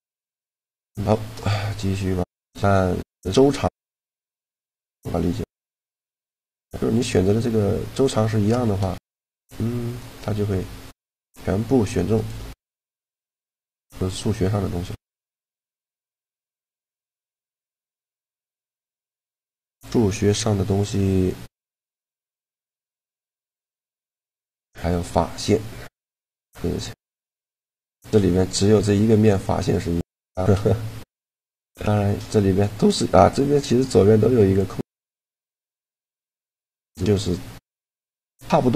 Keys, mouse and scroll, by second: 0.2 a, 1.2-2.8 right drag, 1.7 shift+g, 4.9 click, 5.6 middle click, 6.4-8.2 right drag, 8.0-9.4 middle drag, 8.4 shift+g, 12.0-13.2 right drag, 12.3 shift+g, 13.2 middle click, 14.8-16.7 drag, 17.2-19.6 drag, 19.0 n, 22.7 a, 23.4-25.2 right drag, 23.6 shift+g, 25.2 click, 27.0 middle click, 27.9 middle click, 34.4-36.1 drag.